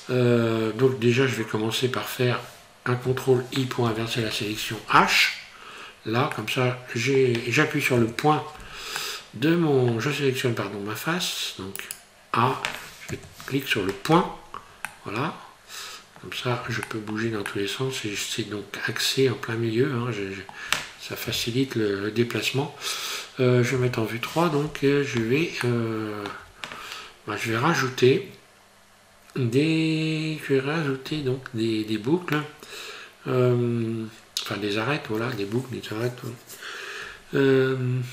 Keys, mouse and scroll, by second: 3.9 ctrl+i, 4.9 h, 6.3 middle click, 7.9 KP_Decimal, 9.0 middle click, 11.8 right click, 13.1 KP_Decimal, 14.9 middle click, 16.9 shift+middle click, 17.5 middle click, 19.4 middle click, 19.7 middle click, 20.1 middle click, 20.3 middle click, 20.5 middle click, 21.2 KP_1, 23.7 KP_3, 25.6 shift+middle click.